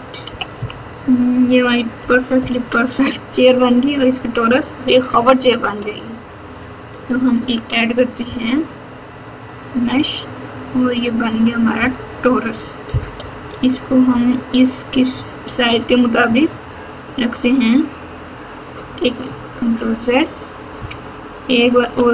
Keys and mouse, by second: 0.2 KP_2, 0.5 KP_2, 1.9 KP_8, 2.3 KP_4, 7.3 shift+a, 13.1 KP_7, 15.4 s, 19.6 ctrl+z, 21.9 ctrl+z.